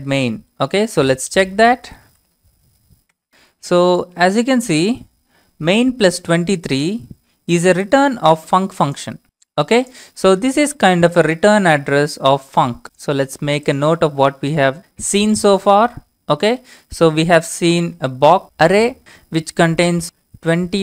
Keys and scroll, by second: 0.0-0.3 typing, 0.7 Tab, 1.3-2.6 typing, 3.1 Return, 3.6 Return, 17.7-20.8 typing.